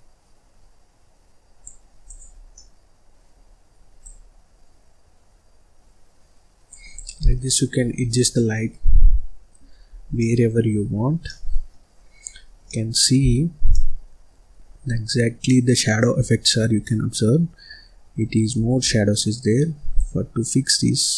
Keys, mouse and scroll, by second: 1.9 click, 2.4-3.9 middle drag, 3.9 click, 6.8 click, 7.1 scroll down 1, 7.3 middle click, 7.9-8.3 scroll up 1, 8.3-9.5 middle drag, 9.5-10.1 scroll down 9, 10.1 middle click, 10.7-11.1 scroll up 5, 11.1 middle click, 11.8-12.5 scroll up 6, 12.5 scroll down 2, 12.6 middle click, 13.2-13.6 scroll down 1, 13.6 middle click, 14.4-14.7 scroll down 3, 14.7-15.4 scroll up 5, 15.4 middle click, 16.1-16.5 scroll down 1, 16.5-16.8 scroll up 1, 16.8-17.8 middle drag, 17.8-18.2 scroll down 1, 18.2-18.8 scroll up 1, 18.8-19.9 scroll down 1, 19.9 click.